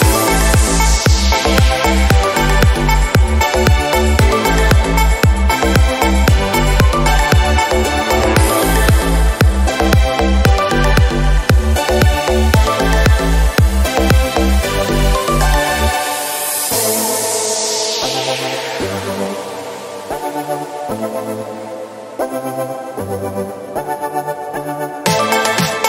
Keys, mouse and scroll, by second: 0.1-1.3 middle drag, 1.3 click, 2.1 g, 3.5 KP_0, 3.8-4.5 scroll up 1, 4.5 click, 4.8 click, 5.9 Tab, 6.1-6.7 scroll down 1, 6.7-8.4 scroll up 4, 8.4 Tab, 8.9 click, 9.5 g, 12.1 click, 12.2 g, 13.7 Tab, 13.9 click, 14.4-15.3 scroll down 1, 15.3 scroll up 1, 16.4 click, 17.7-19.7 drag, 22.6-22.9 scroll up 2, 22.9 click, 23.3 s, 25.3-25.7 scroll down 2, 25.7 Tab.